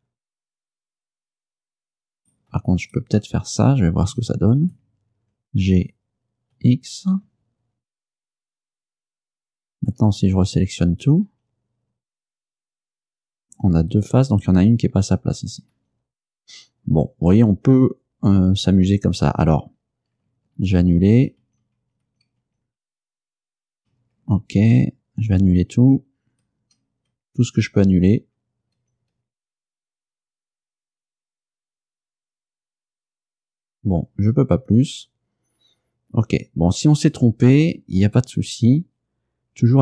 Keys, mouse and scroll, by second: 2.3 right click, 2.9 shift+right click, 4.2 g, 6.6 x, 8.7 ctrl+click, 10.3 a, 11.0 a, 12.5 a, 15.8 a, 20.6 ctrl+z, 26.3 ctrl+z, 33.5 ctrl+z, 37.7 a.